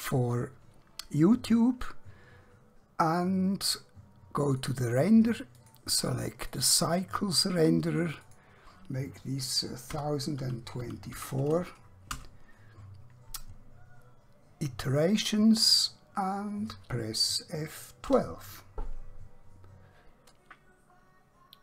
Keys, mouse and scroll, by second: 4.5 click, 9.9-11.1 typing, 12.2 Return, 18.1 F12.